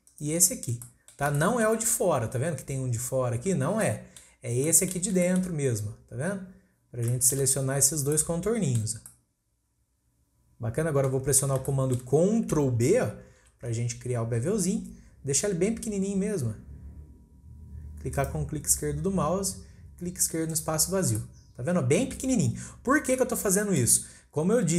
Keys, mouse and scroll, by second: 0.1 alt+shift+click, 0.5 scroll down 1, 0.8 scroll up 1, 0.8-4.4 middle drag, 4.4 scroll down 1, 4.7-7.9 middle drag, 7.9 scroll down 1, 8.1-11.3 middle drag, 11.3-11.7 scroll up 2, 11.7-13.4 shift+middle drag, 13.4 ctrl+b, 18.7-20.5 scroll down 2, 20.5 click, 21.1-22.4 middle drag, 22.4-23.1 scroll up 1, 23.1 scroll down 1, 23.2 middle click, 24.0-24.7 scroll up 2.